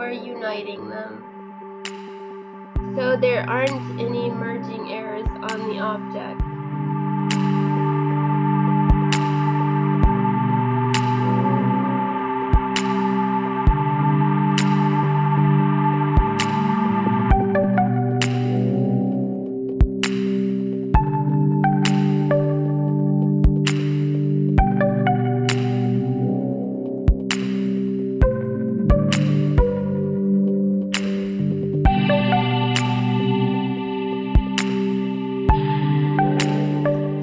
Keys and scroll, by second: 1.3 space, 1.5 space, 4.1 e, 4.5 space, 4.9 Delete, 5.6 space, 6.1 Delete, 6.8 Delete, 7.1 space, 9.2 space, 10.1 space, 10.4 space, 11.6 space, 13.7 Delete, 15.3 space, 16.6 space, 17.4 Delete, 17.8 space, 18.2 space, 18.6 space, 20.6 space, 21.3 Delete, 21.4 space, 23.0 space, 23.8 space, 24.7 Delete, 26.6 space, 29.7 Delete, 31.7 space, 35.4 space, 36.2 ctrl+s, 36.7 space, 37.0 ctrl+z.